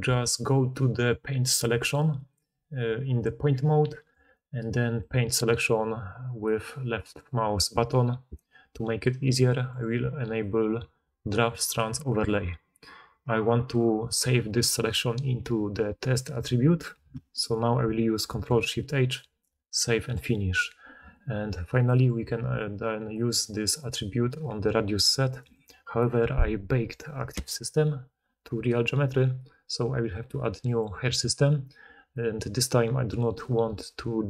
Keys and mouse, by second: 0.2-19.3 right drag, 18.2 ctrl+shift+h, 19.3-34.2 drag.